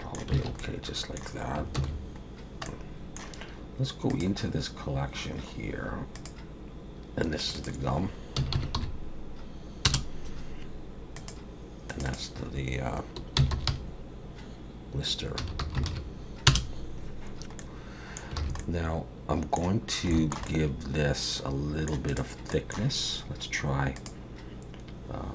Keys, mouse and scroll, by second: 0.4 alt+a, 0.6 middle click, 1.8 ctrl+s, 2.4-2.7 scroll down 1, 2.7 middle click, 4.1 click, 4.5-4.9 scroll down 4, 5.2-5.7 scroll down 7, 6.2 click, 7.4 click, 7.6 click, 11.1 click, 11.9 click, 12.1 click, 17.6 middle click, 18.4 alt+a, 18.6 middle click, 20.1 shift+middle click, 20.5 middle click, 22.1 click, 22.5 middle click, 24.0 click.